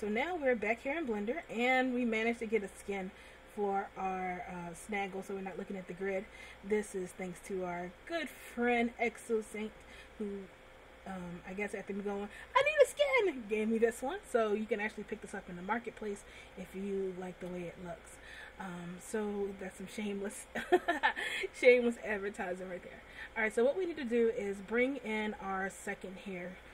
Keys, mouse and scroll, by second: 1.8 click, 3.1 middle click, 5.7 scroll up 1, 7.6 click, 15.4 middle click, 16.8 shift+middle click, 17.9 middle click, 19.2 scroll down 1, 22.1 middle click, 26.1 click.